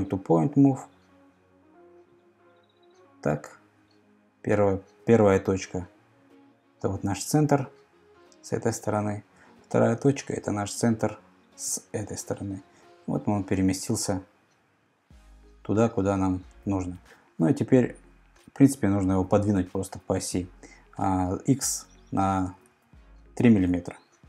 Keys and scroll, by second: 22.6 super+Tab, 23.6 super+Tab.